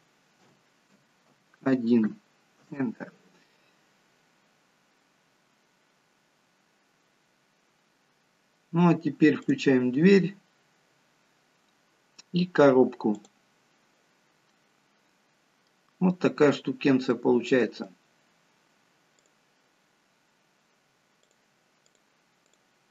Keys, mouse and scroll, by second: 6.9-7.9 scroll down 1, 9.4 click, 9.4-10.1 scroll down 1, 11.7-12.3 scroll down 1, 13.1 click, 14.1 scroll down 2, 14.4 middle click, 17.0 middle click, 19.1 click, 21.1 click.